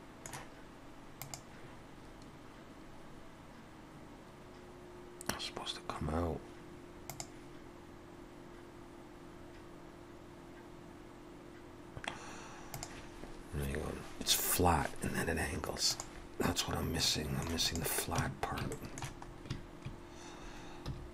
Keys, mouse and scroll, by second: 17.0 middle click, 17.6 click, 18.2 Tab, 18.7 shift+middle click, 19.3 scroll up 2, 20.9 2.